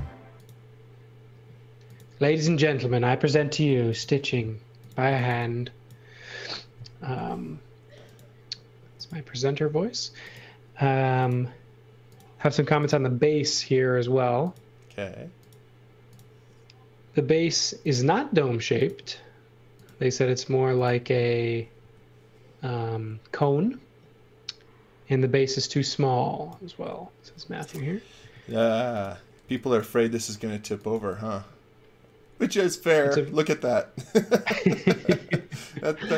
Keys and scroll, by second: 3.7 l, 4.8-5.8 typing, 7.2 l, 21.8 e, 28.2 space, 29.4 x, 30.6 x, 30.9 v.